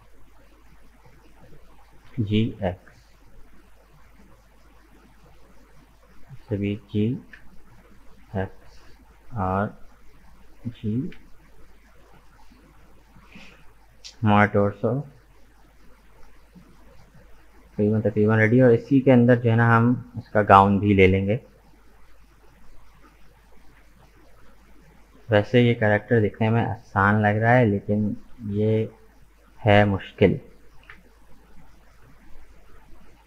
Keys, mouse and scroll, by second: 1.0-2.1 drag, 2.1 g, 5.6-6.8 drag, 6.8 g, 9.0-10.6 drag, 10.6 g, 14.6 Tab, 15.3-18.3 middle drag, 23.0 click, 23.9-25.5 shift+middle drag, 25.5 Tab, 27.0-28.1 drag, 28.1 right click, 29.1 shift+right click, 29.5 shift+right click, 29.9 shift+right click, 30.8 KP_1, 32.3-32.6 scroll down 1, 32.6-33.2 shift+middle drag.